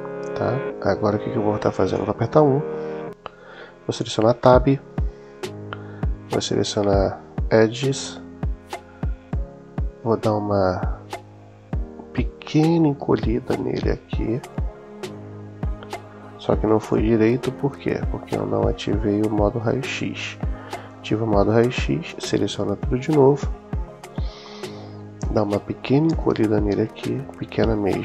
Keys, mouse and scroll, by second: 1.8 KP_1, 3.8 Tab, 6.3 click, 7.8-9.3 drag, 12.7 s, 16.7 Escape, 18.2 middle click, 19.8 click, 20.7-22.1 drag, 26.4 s.